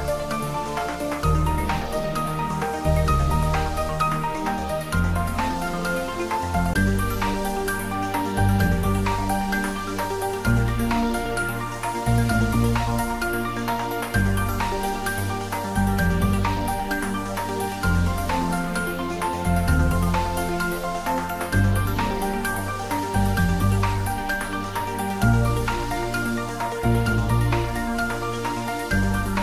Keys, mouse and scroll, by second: 2.9 shift+z, 3.5-4.5 scroll down 2, 4.5-6.7 drag, 7.1 shift+d, 7.9 y, 12.7 click, 13.1 1, 14.3 Tab, 14.8 middle click, 15.5 shift+z, 15.8 scroll up 1, 16.9 click, 17.9-20.2 middle drag, 20.2 click, 21.1 Tab, 22.1 click, 22.6-23.7 scroll down 1, 23.7 scroll up 1, 24.7 click, 25.7 scroll up 1, 26.4-29.2 middle drag.